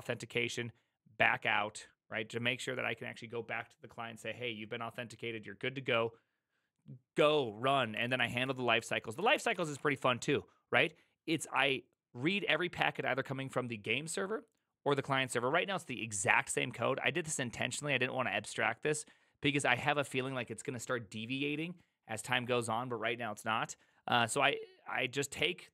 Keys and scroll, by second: 7.9-10.7 typing.